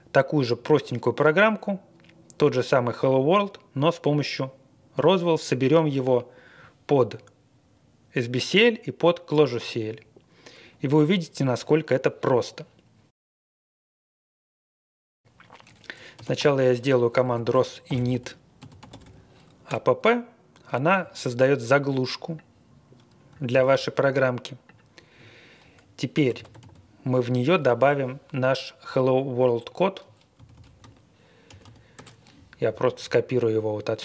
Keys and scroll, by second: 15.9-19.5 typing, 19.7 Return, 23.5 super+c, 26.0-27.0 typing, 30.1-32.0 typing.